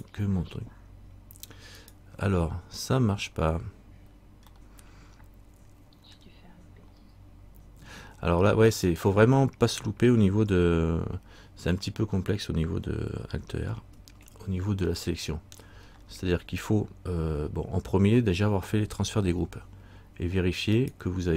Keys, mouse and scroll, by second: 0.1 right click, 2.3 right click, 4.7 middle click, 6.3 middle click, 7.1 scroll up 1, 8.7 scroll up 1, 8.9 right click, 15.2 middle click, 16.0-17.3 scroll down 1, 20.9 right click.